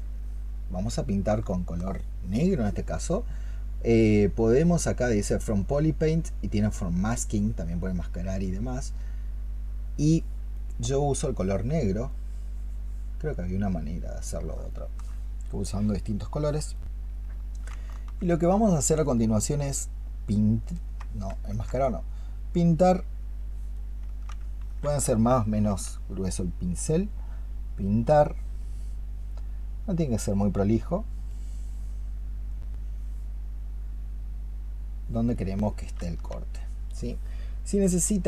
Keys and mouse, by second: 0.4 double click, 1.3 alt+click, 14.6 alt+click, 17.8 alt+click, 18.2 alt+click, 19.3 alt+click, 19.8 ctrl+click, 21.4 ctrl+click, 23.9 ctrl+click, 24.5 ctrl+z.